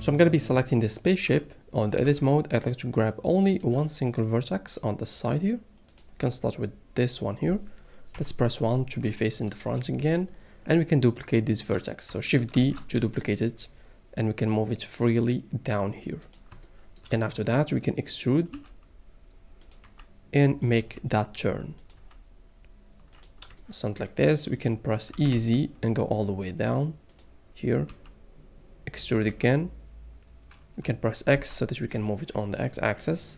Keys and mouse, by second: 2.0 Tab, 3.5 click, 5.9 click, 8.1 KP_1, 12.5 shift+d, 16.2 click, 16.6 shift+middle click, 18.5 e, 19.6 click, 19.8 e, 20.6 click, 21.8 click, 21.8 e, 21.9 e, 23.1 click, 23.5 shift+middle click, 25.1 e, 25.3 z, 27.1 click, 27.8 e, 29.3 e, 31.3 x.